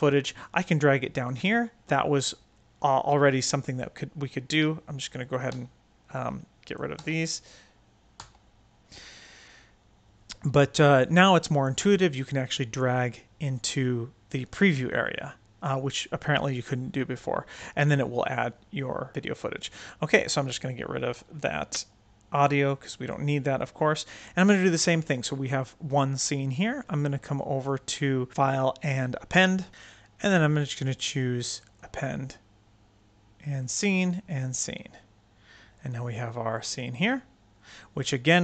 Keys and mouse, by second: 5.1 click, 5.4 x, 6.0-6.7 drag, 6.9 x, 8.1 x, 19.7 click, 21.0 x, 25.0 click, 27.5-29.2 drag, 31.4 click, 31.6 click, 33.3 click, 33.5 drag, 34.2 click, 34.4 drag, 35.6 click.